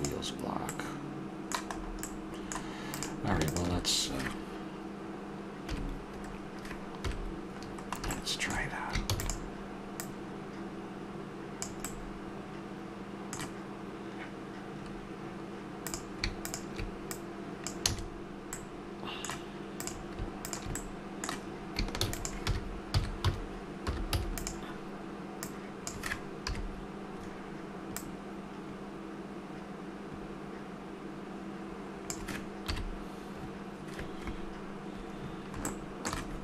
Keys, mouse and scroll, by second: 0.7-2.9 middle drag, 2.9-3.6 drag, 3.6-5.3 middle drag, 5.6 KP_3, 7.0 KP_1, 7.6-9.2 middle drag, 9.0 shift+d, 11.9-12.4 middle drag, 14.8 middle click, 15.8-17.9 drag, 17.9 a, 19.8-20.4 right drag, 20.9-21.4 middle drag, 21.9 shift+d, 22.4 r, 26.4 KP_3, 32.7 KP_1.